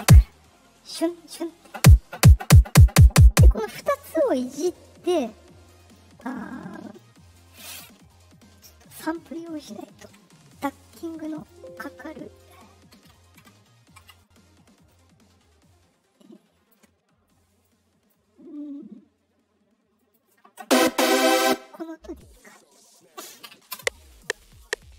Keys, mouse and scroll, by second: 5.9-6.9 drag, 9.6 click, 11.3 click, 14.8-16.6 drag, 17.6 click, 19.9 click, 22.8 click, 23.7 space.